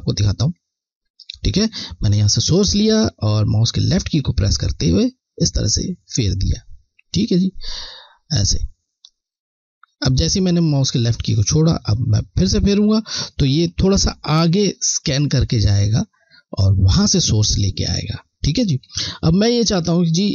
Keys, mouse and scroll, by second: 2.3 alt+click, 12.3 click, 12.7 click, 18.6 click, 18.9 z, 19.6 ctrl+z.